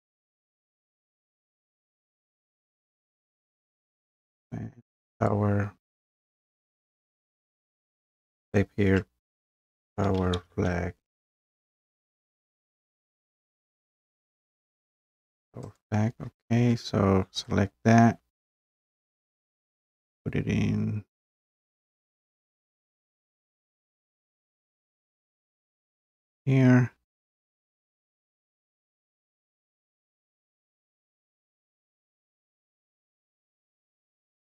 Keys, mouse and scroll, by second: 5.3-8.0 drag, 9.1-12.8 typing, 15.8 click, 17.5 click, 20.3-20.8 scroll, 21.1 scroll, 22.1 scroll down 4, 22.2-22.6 scroll, 25.6 click, 27.1 scroll down 2, 30.5 click, 32.3 click, 33.4 click, 33.7 scroll, 34.0-34.4 scroll down 3.